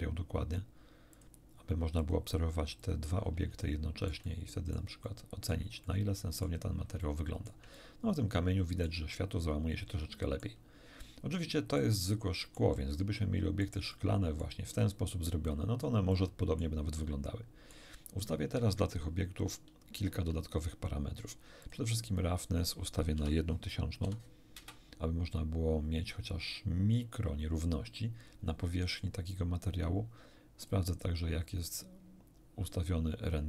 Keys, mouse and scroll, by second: 1.1 click, 2.0 click, 2.8 click, 3.6-4.9 shift+middle drag, 5.1 shift+middle click, 5.8 shift+middle click, 7.0 shift+middle click, 8.0-9.1 shift+middle drag, 9.5-10.6 middle drag, 11.0 middle click, 12.1-13.8 shift+middle drag, 13.9 middle click, 14.7 scroll up 2, 15.5 middle click, 16.1 middle click, 16.9-17.9 middle drag, 19.9 shift+F3, 21.6 click, 22.1 click, 23.1 0, 24.0 1, 24.5 Return, 30.6 click.